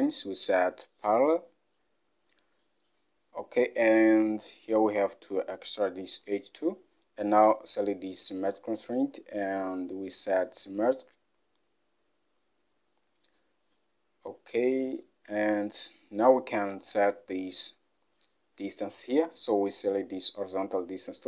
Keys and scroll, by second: 17.2 alt+Tab.